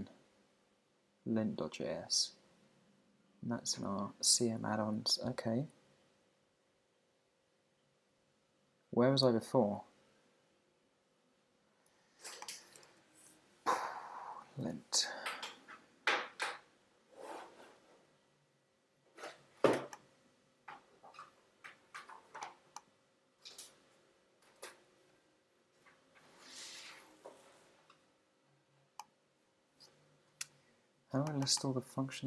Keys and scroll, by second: 12.8 shift+1, 15.1 Return.